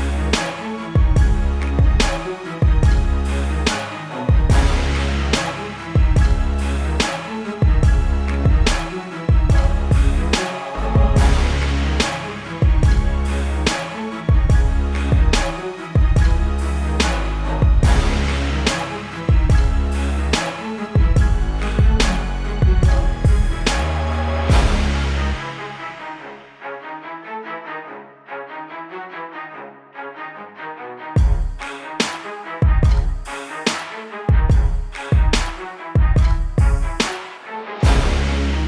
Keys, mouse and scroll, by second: 0.2-1.0 typing, 1.4 click, 5.8 ctrl+KP_0, 6.6 -, 6.9 click, 14.6 click, 18.8 click, 33.7 click, 36.0-36.7 scroll down 1, 36.7-38.4 scroll up 1, 38.4 click.